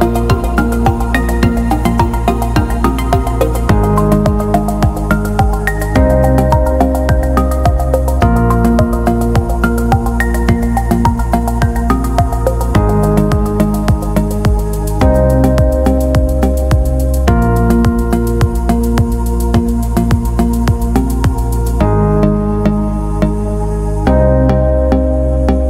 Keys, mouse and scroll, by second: 1.1 click, 1.9 right click, 12.3 click, 15.1-18.5 scroll up 9, 18.6-20.5 scroll up 6, 21.2-21.5 scroll up 2, 22.1-23.3 scroll down 5, 23.7 scroll up 2.